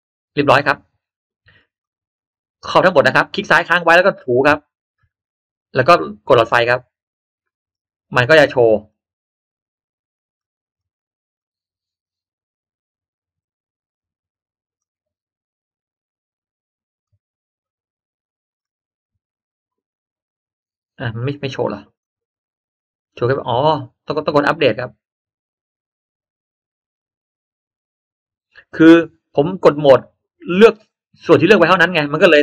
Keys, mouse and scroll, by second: 1.7-3.9 drag, 4.7 click, 7.3-8.0 scroll down 1, 8.2 middle click, 8.2 scroll up 1, 10.7 click, 11.3-12.5 drag, 14.7 click, 16.9 click, 21.2 middle click, 21.6-22.0 scroll down 1, 22.0 click, 25.1 click.